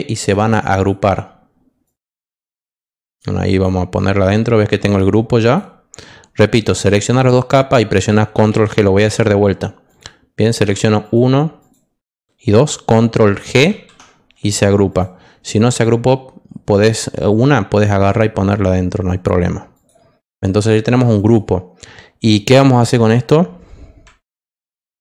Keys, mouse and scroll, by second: 0.1 click, 0.7 click, 1.8 click, 2.7 click, 4.8 click, 5.4 click, 8.4 ctrl+z, 9.8 click, 11.0 ctrl+click, 11.6 ctrl+click, 13.7 ctrl+g, 14.9 click, 15.8-17.8 drag, 19.0 click, 19.7 click, 21.1 click, 24.3 ctrl+j.